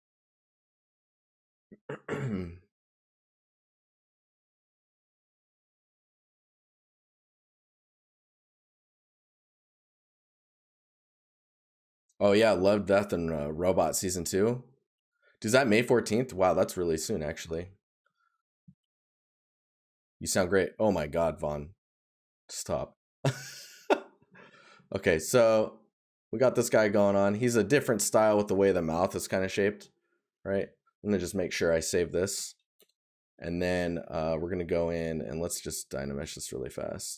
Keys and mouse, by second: 14.3 right click, 15.8 right click, 22.0 right click, 24.2 right click, 29.9 right click.